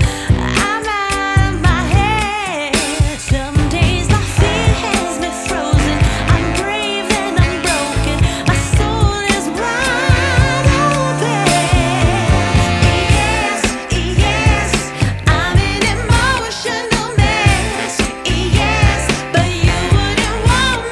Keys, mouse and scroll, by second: 0.1 click, 0.6 middle click, 0.8 middle click, 1.0 click, 1.4 click, 2.0 middle click, 2.3 middle click, 3.9 middle click, 4.1 middle click, 4.3 drag, 5.7 click, 6.3 middle click, 13.7 click, 14.0 drag, 14.4 middle click, 14.6 shift+middle click, 14.8 middle click, 15.2 middle click, 15.7 click, 16.1 shift+middle click, 16.5 middle click, 16.8 click, 17.7 click, 19.6 click, 19.9 shift+click, 20.1 click, 20.3 click, 20.7 click.